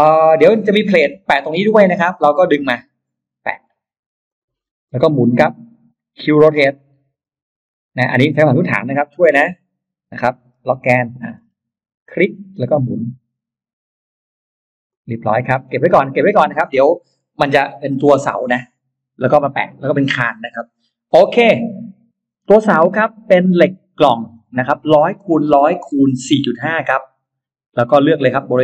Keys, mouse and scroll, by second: 2.7 click, 4.1 click, 4.5-5.6 scroll up 2, 7.1 q, 9.4 Left, 10.9 Right, 10.9 click, 11.2-11.5 scroll down 1, 12.4 click, 14.7 click, 15.1 middle click, 15.5 space, 15.5 middle click, 16.0-16.3 scroll up 1, 16.5 click, 22.3 scroll up 1, 22.9 middle click, 23.1-23.8 scroll up 3, 27.1 click.